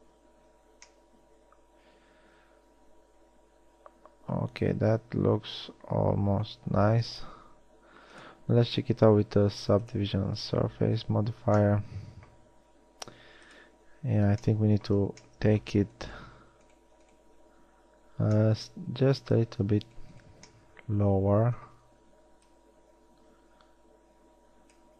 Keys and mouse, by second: 0.4 Tab, 4.4 middle drag, 4.6 middle click, 4.8 middle drag, 6.2-7.2 middle drag, 13.9 Tab, 14.6 middle click, 16.1-17.1 middle drag, 18.5 middle click, 21.2 middle click, 24.3 middle click.